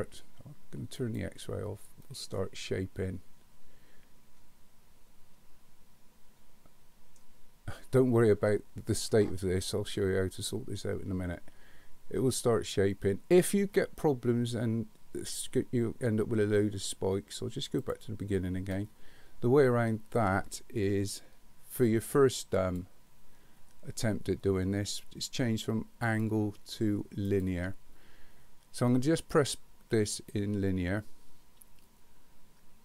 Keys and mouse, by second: 1.0 click, 2.1-7.2 middle drag, 17.9 click, 22.0 click, 26.2-27.4 drag, 30.2 click.